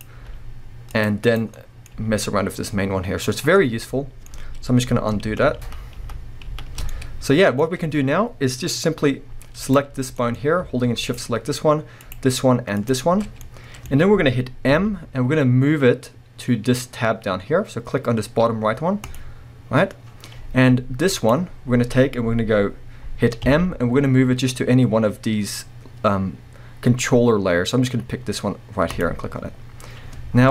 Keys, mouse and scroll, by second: 0.2 g, 1.2 click, 1.5 scroll down 1, 1.7 middle click, 1.9 g, 3.4 right drag, 3.8-9.6 middle drag, 5.3 ctrl+z, 7.6-8.2 scroll up 2, 8.2 scroll down 2, 8.8-9.6 scroll up 2, 9.6 click, 10.0 scroll down 1, 10.2-11.0 middle drag, 10.4-11.0 scroll up 2, 11.0 shift+click, 12.0 shift+click, 12.8 shift+click, 13.4-21.2 middle drag, 14.7 m, 21.2 click, 23.4 m, 30.3 scroll down 1.